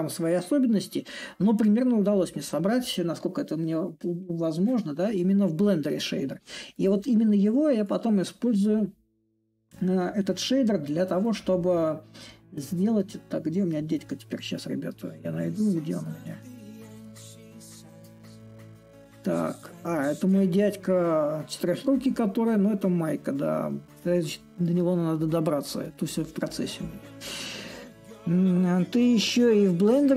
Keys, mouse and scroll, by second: 4.4-6.5 drag, 6.5-12.0 right drag, 12.0-13.7 middle drag, 13.7 right click.